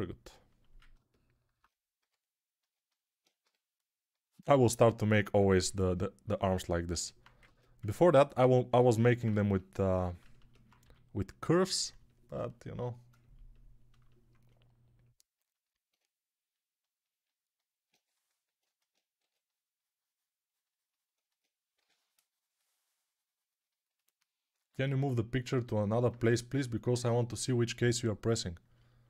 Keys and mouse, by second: 1.9 g, 2.6-4.1 alt+drag, 3.3 g, 5.5 g, 7.3 ctrl+Tab, 7.7-15.5 ctrl+alt+right drag, 8.7 ctrl+r, 10.1-15.5 alt+shift+drag, 10.1-11.8 alt+shift+middle drag, 10.7 g, 19.1 2, 21.6 6.